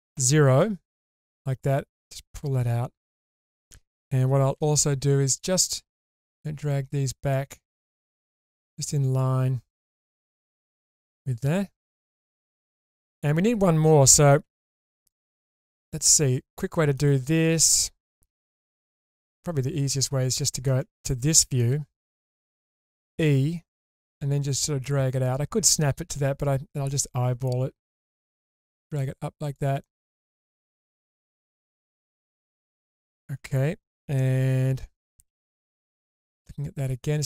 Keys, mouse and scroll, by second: 0.1 0, 1.0 click, 1.9 click, 4.5 1, 5.3 click, 6.0 click, 7.9 click, 8.5 click, 9.5-10.8 scroll up 1, 10.8 click, 11.4 click, 15.1 click, 15.6-17.0 middle drag, 15.6 typing, 17.2-18.1 scroll up 2, 18.1 alt+z, 18.5-20.7 middle drag, 21.1-21.6 scroll up 3, 21.6 shift+middle click, 23.0 e, 27.1-29.4 scroll up 1, 29.4 click, 29.8-31.0 middle drag, 31.3-31.9 scroll down 1, 32.0 shift+middle click, 32.5 middle click, 33.5-34.4 scroll up 1, 34.4-34.8 scroll up 2, 34.4 1, 35.3 alt+z, 36.3 click.